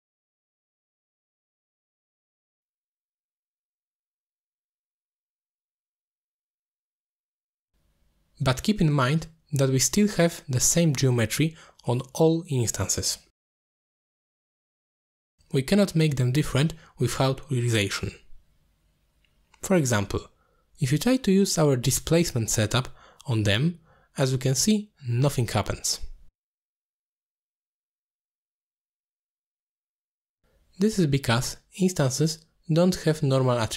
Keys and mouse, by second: 0.0 click, 0.6 middle click, 1.0 click, 2.2 middle click, 3.6 middle click, 4.1-5.4 drag, 5.6 middle click, 6.0 middle click, 6.2 middle click, 6.8-7.8 drag, 8.1 click, 8.4 click, 8.7 click, 9.8 click, 10.2 click, 11.4 click, 11.8 middle click, 13.9-15.0 middle drag, 15.3 middle click, 15.8 click, 16.3-17.0 typing, 18.2 drag, 18.5 g, 18.9 click, 19.2 middle click, 19.6 middle click, 20.5 middle click, 21.1 middle click, 21.5-21.8 drag, 22.1 middle click, 22.3 shift+d, 22.7 middle click, 22.9 click, 23.3 click, 23.4 x, 23.5 click, 23.7 x, 23.9 drag, 24.4 middle click, 24.6 g, 25.0 middle click, 25.1 g, 25.9 middle click, 26.3 g, 26.5 click, 26.7 alt+shift+click, 26.9 click, 27.2 click, 27.3 m, 29.6-31.7 drag, 32.3 ctrl+z, 32.7 click, 33.5 middle drag.